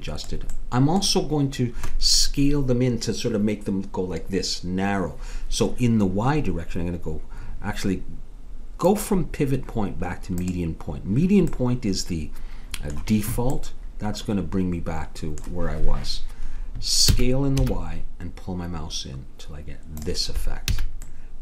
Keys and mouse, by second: 0.6-4.7 middle drag, 8.9-11.6 drag, 11.6-13.6 middle drag, 17.1 s, 20.8 a, 21.3-21.4 middle drag.